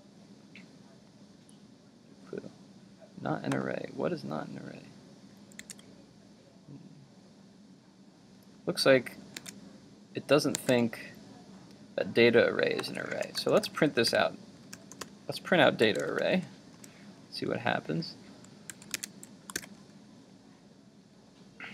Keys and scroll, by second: 5.6 super+Tab, 9.4 super+Tab, 18.7 super+s, 19.1 super+Tab, 19.6 super+r.